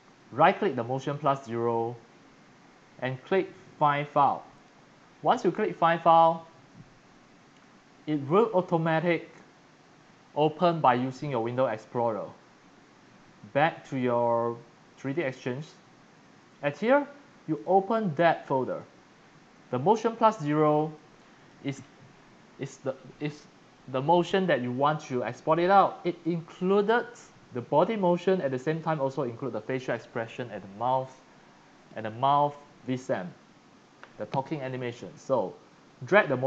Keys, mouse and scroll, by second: 4.5 click, 7.6 click, 15.2 click, 17.5 click, 18.4 click, 18.7 click, 18.8 click, 20.9 click, 25.3-26.6 drag, 28.7 click, 29.8 click.